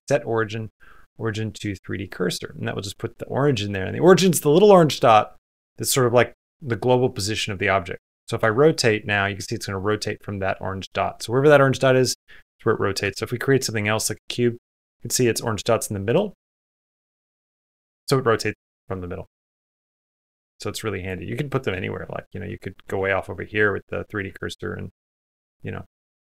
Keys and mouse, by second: 8.6 r, 13.0 shift+a, 14.8-15.9 middle drag, 16.2 r, 19.2 x, 19.9 click, 20.3 shift+middle click, 20.5 middle click, 21.3 shift+middle click, 22.4 shift+click, 22.9 shift+middle click, 24.0 Tab, 25.0 Escape, 25.3 click, 26.0 Tab.